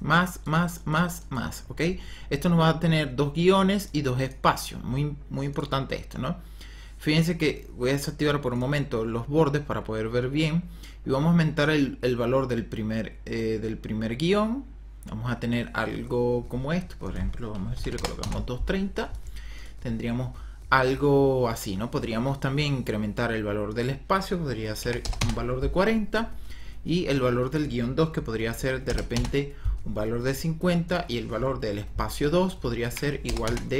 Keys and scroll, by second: 17.5 KP_2, 17.8 KP_3, 17.9 KP_0, 18.1 Return, 24.7 KP_4, 25.2 Return, 28.4 KP_5, 28.7 KP_0, 29.0 Return, 32.7 KP_4, 33.1 KP_0, 33.4 Return.